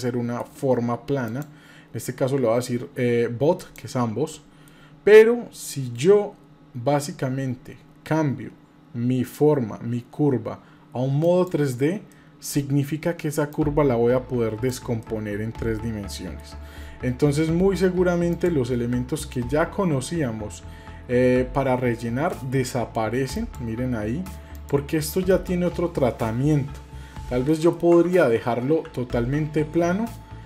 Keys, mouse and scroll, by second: 1.3-3.8 drag, 4.3 middle click, 11.2 click, 12.1 middle click, 13.5-14.7 drag, 15.0-16.6 middle drag, 18.3-23.5 drag, 23.5-24.0 middle drag, 24.5 click, 27.5 middle click, 28.4 ctrl+z, 28.8 ctrl+z.